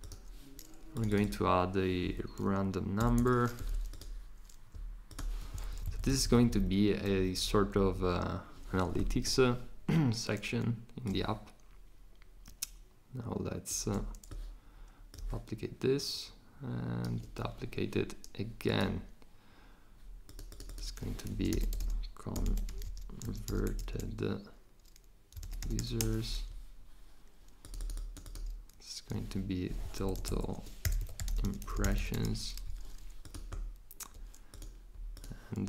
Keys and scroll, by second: 2.0-3.7 typing, 21.0-26.5 typing, 30.5-32.8 typing.